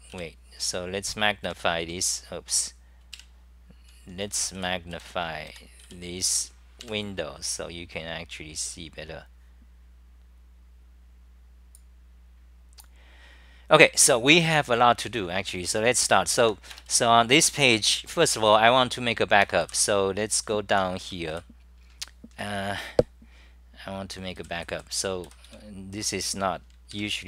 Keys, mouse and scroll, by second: 0.2 middle click, 0.2 w, 1.5 super+=, 3.1 super+-, 4.5 w, 4.9 w, 5.5 3, 5.8 w, 10.4 w, 12.6-13.3 typing, 12.8 middle click, 16.4 ctrl+g, 20.2-21.8 typing, 24.4-26.0 typing, 26.9 super+=.